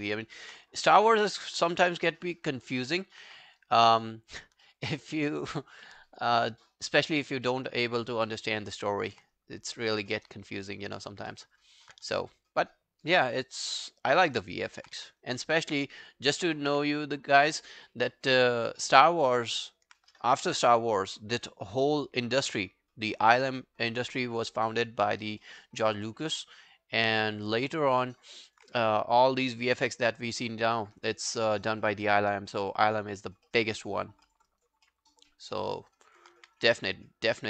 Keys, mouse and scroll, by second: 0.0 alt+middle click, 0.2 alt+right click, 4.7 alt+middle click, 4.9 alt+right click, 5.1 alt+click, 5.5 alt+middle click, 5.7 alt+right click, 6.0 alt+click, 6.5 alt+middle click, 6.8 alt+right click, 7.1 alt+click, 7.5 alt+middle click, 7.7 alt+right click, 7.9 alt+click, 8.3 alt+middle click, 8.5 alt+right click, 8.8 alt+click, 9.4 right click, 10.6 double click, 10.9 alt+click, 11.3 alt+right click, 11.6 alt+click, 13.3 alt+click, 14.2 alt+middle click, 14.4 alt+right click, 14.6 alt+click, 15.0 q, 15.2 right click, 17.0-17.6 scroll down 3, 17.7 alt+click, 18.1 alt+middle click, 18.4 alt+scroll down 1, 18.7 alt+click, 19.1 alt+middle click, 19.5 alt+click, 25.4 alt+middle click, 25.7 alt+right click, 25.9 alt+click, 26.3 alt+middle click, 26.5 alt+right click, 26.8 alt+click, 27.2 alt+middle click, 27.4 alt+right click, 27.7 alt+click, 28.0 alt+middle click, 28.3 alt+right click, 31.1 alt+middle click, 31.5 alt+scroll down 1, 31.7 alt+click, 32.1 alt+middle click, 32.4 alt+scroll down 1, 32.6 alt+middle click, 32.9 alt+right click, 33.1 alt+click, 33.5 alt+middle click, 33.8 alt+right click, 34.0 alt+click, 34.3 alt+middle click, 34.5 alt+right click, 34.9 alt+middle click, 35.2 alt+right click, 35.6 alt+middle click, 35.8 alt+right click, 36.1 alt+click, 36.4 q, 36.6 right click.